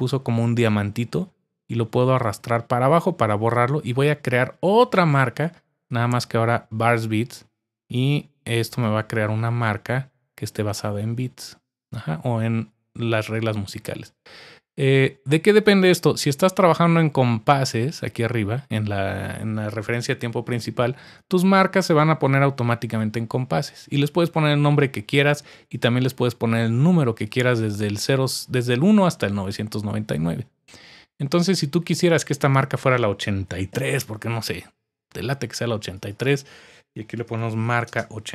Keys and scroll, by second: 33.2-34.2 typing, 36.9-38.3 typing.